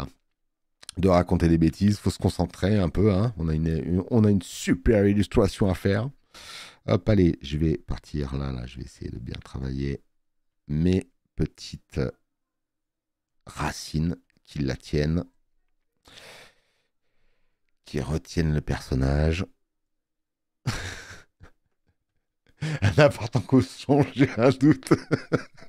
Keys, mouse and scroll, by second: 1.7 space, 1.8 click, 21.8 space, 22.2 click.